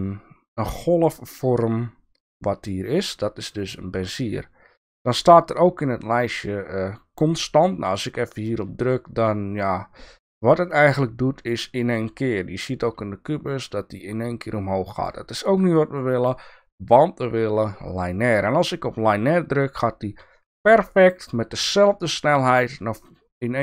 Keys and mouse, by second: 3.4-7.9 right drag, 7.9 click, 10.6-15.0 drag, 16.1-17.9 right drag, 18.5 click, 23.1-23.6 drag.